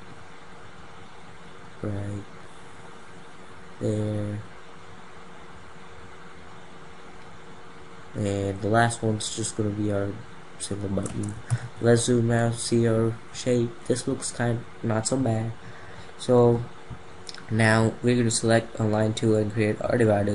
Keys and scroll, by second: 11.0 ctrl+0.